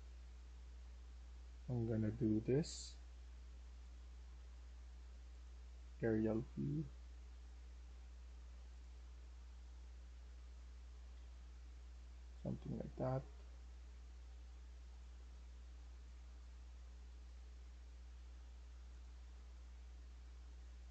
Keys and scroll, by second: 0.0-2.3 typing, 5.5-6.3 a, 6.5 a, 6.5 a, 6.6 a, 8.9-11.0 typing, 14.0 e, 17.0 e, 20.3-20.9 typing.